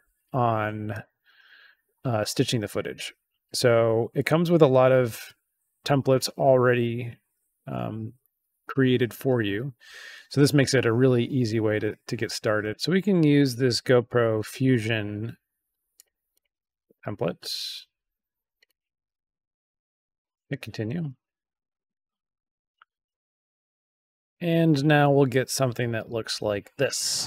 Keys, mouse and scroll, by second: 2.3 scroll down 2, 4.3-4.6 scroll down 2, 11.6 scroll up 2, 12.7 scroll down 2, 13.8 click, 15.9 click, 16.2 click, 18.5 click, 20.3 click, 23.0 click.